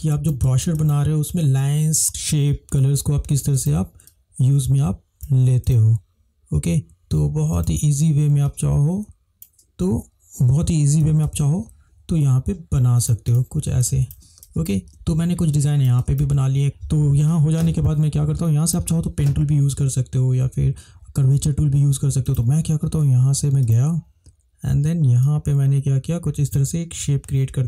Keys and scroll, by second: 0.5 =, 0.5 space, 11.3 ctrl+-, 11.5 ctrl+-, 16.6 Delete, 18.1 ctrl+=, 19.2 ctrl+space.